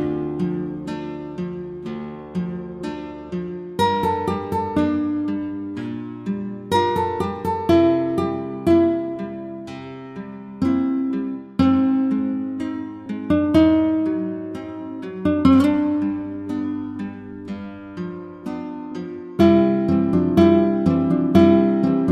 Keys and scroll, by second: 7.4 Return.